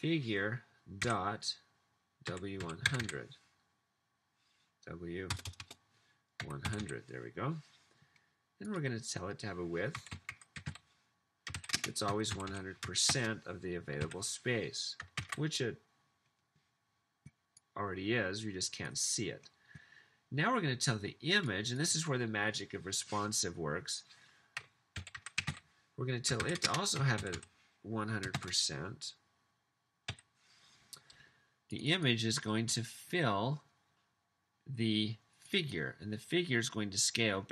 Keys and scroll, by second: 2.3-4.1 typing, 5.4-8.2 typing, 10.0-14.0 typing, 15.4 super+s, 24.4-28.8 typing, 30.1 typing.